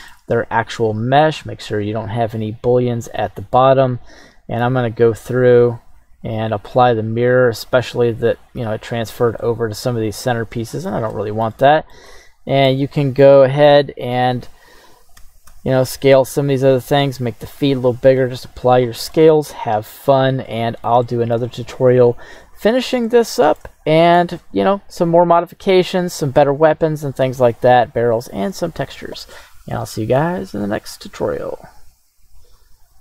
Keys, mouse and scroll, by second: 0.3 scroll up 1, 0.9-1.8 scroll down 4, 2.6 right click, 4.1 right click, 6.4 click, 7.9 click, 9.4-10.9 middle drag, 11.1 shift+middle click, 12.0 scroll up 1, 12.1 middle click, 13.0 middle click, 13.4 shift+middle click, 13.8-14.2 scroll up 2, 14.5 right click, 15.5 s, 15.5 x, 17.3 click, 17.6 ctrl+a, 19.1 middle drag, 19.8 right drag, 20.0-20.3 scroll down 3, 20.5 middle click, 21.0-21.3 shift+middle drag, 21.6-22.1 scroll up 1, 23.0-23.6 shift+middle drag, 26.4-27.4 middle drag, 30.0-30.3 scroll up 2.